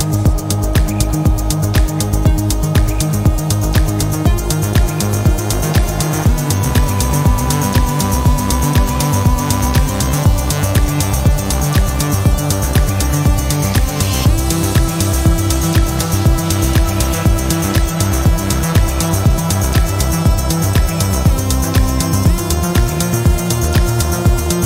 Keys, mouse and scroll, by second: 0.0 click, 2.5 click, 3.9 click, 5.0 click, 5.6 click, 8.0 click, 10.6 click, 13.5 click, 14.6 click, 17.2 click, 17.4 click, 17.8 click, 20.4 click, 20.8 click, 23.0 click, 23.5 click, 24.4 click.